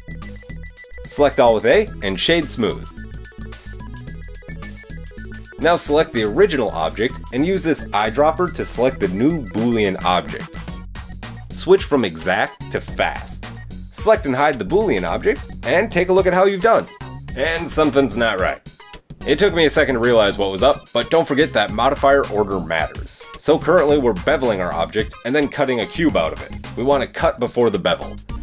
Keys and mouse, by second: 1.0 Tab, 1.9-4.1 drag, 3.0 Tab, 4.1 middle click, 4.2-8.1 drag, 6.2 middle click, 6.2 right click, 8.1-12.4 middle drag, 12.4-13.5 drag, 13.5-14.6 middle drag, 14.6 click, 14.8-16.7 middle drag, 16.7 click, 16.7-20.0 middle drag, 19.5 Tab, 20.0 Tab, 20.6 drag, 21.2 Tab, 22.8 Tab, 23.8 Tab, 24.1-25.7 shift+middle drag, 25.8 Tab, 27.7 Tab.